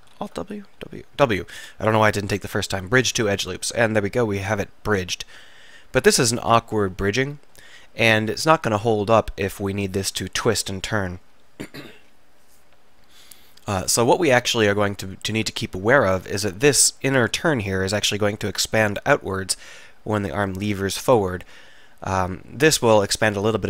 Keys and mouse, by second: 0.2 alt+w, 0.9 w, 4.1 click, 4.4-5.5 middle drag, 6.3 middle click, 6.9-8.3 middle drag, 8.9 middle click, 14.5-15.9 middle drag, 19.3-22.2 middle drag.